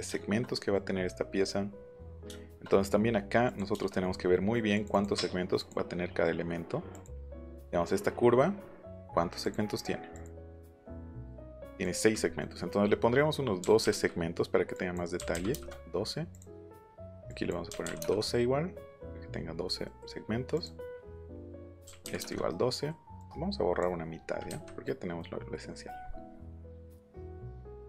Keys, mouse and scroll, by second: 3.4 click, 4.7 click, 4.9 click, 5.5 click, 6.9 click, 9.4 click, 10.1 click, 10.4 click, 11.6 click, 12.3 middle click, 13.5 KP_1, 13.8 KP_2, 14.7 click, 15.2 KP_1, 15.3 KP_2, 15.5 KP_Enter, 16.3 click, 17.3 click, 17.6 KP_1, 17.8 KP_2, 18.0 Return, 20.5 click, 21.5 click, 21.8 KP_1, 22.0 KP_2, 22.1 Return, 22.5 middle click, 22.5 scroll, 23.2 click, 24.4 Delete, 25.1 scroll down 1, 25.2-25.8 scroll up 1, 26.0 middle click, 26.3-26.7 scroll down 2, 26.5 middle click, 26.9 scroll up 1, 27.7 click.